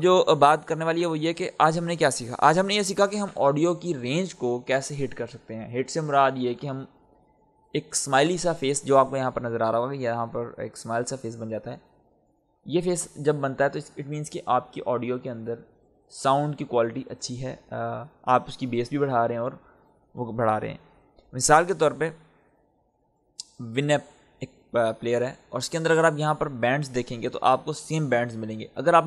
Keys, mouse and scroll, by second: 21.8 click, 22.9 click.